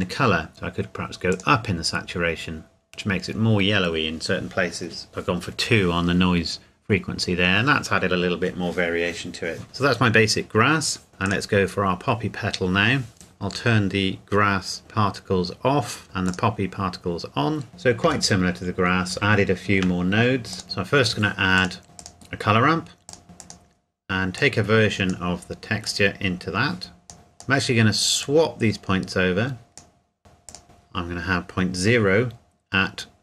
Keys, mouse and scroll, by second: 0.0 click, 0.5 shift+middle click, 0.9 click, 5.1 KP_Enter, 13.9 click, 14.8 click, 17.7-18.1 scroll down 1, 19.1 shift+middle click, 20.5 click, 22.0 click, 23.1 click, 24.7 click, 26.1 click, 30.5 click.